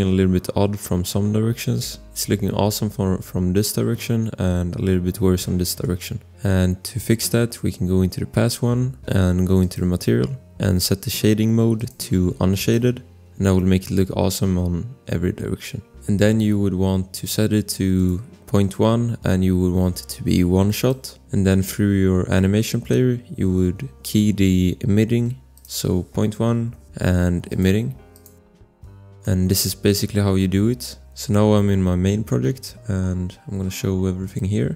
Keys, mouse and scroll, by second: 2.6-3.1 scroll, 5.8 click, 7.1 click, 8.2 scroll, 9.6 click, 16.0 scroll, 17.9 click, 20.7 click, 21.4 click, 22.3 click, 25.0 click, 26.1-27.0 typing, 29.2 click, 29.2 scroll, 30.8 scroll, 31.2 click, 34.2 click.